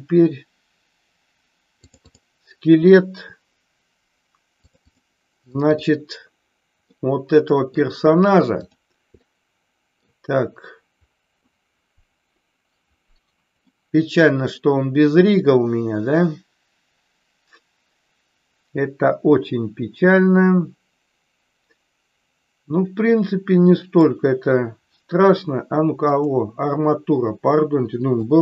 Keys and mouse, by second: 6.8-7.7 middle drag, 8.4 click, 9.2-10.0 middle drag, 13.5-24.0 middle drag, 26.2 click, 28.2-28.4 shift+middle drag.